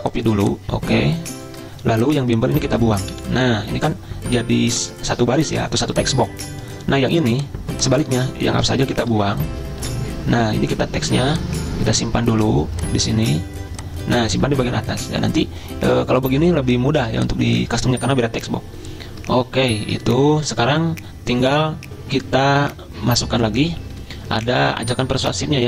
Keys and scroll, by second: 3.2 Delete, 8.7 BackSpace, 9.2 BackSpace, 9.9 BackSpace.